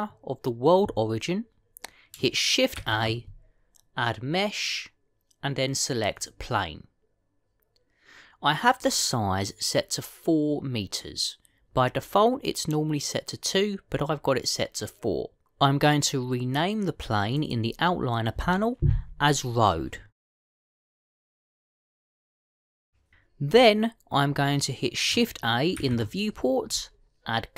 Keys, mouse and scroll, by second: 3.7 shift+a, 18.2 click, 20.0 click, 26.7 shift+a.